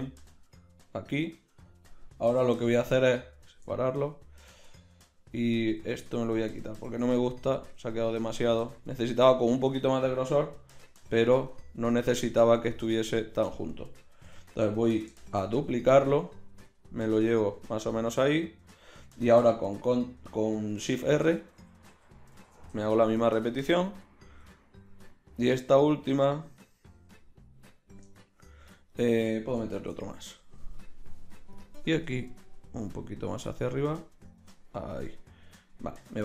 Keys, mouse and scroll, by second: 1.8 click, 2.3 g, 5.4-8.6 typing, 11.0 x, 13.6-15.3 right drag, 14.4 l, 15.3 shift+d, 21.2 shift+r, 21.6 shift+r, 21.9 shift+r, 22.4 shift+r, 29.8 shift+r, 31.6-33.0 middle drag.